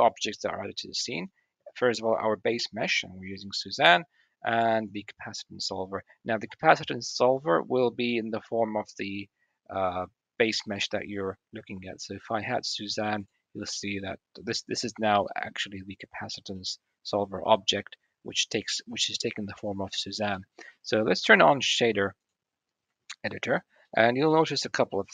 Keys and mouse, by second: 0.7 middle click, 12.4 middle click, 14.3-14.7 middle drag, 16.4 click, 16.5-17.9 middle drag, 20.2 middle click, 22.0 middle click, 23.7-24.1 middle drag, 24.4-24.9 drag, 24.9-25.1 middle drag.